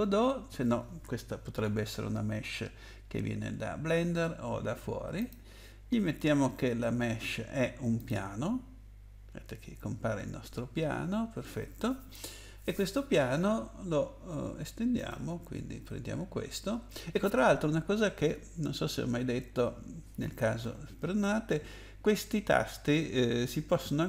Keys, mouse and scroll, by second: 5.2 click, 7.9 click, 14.9 click.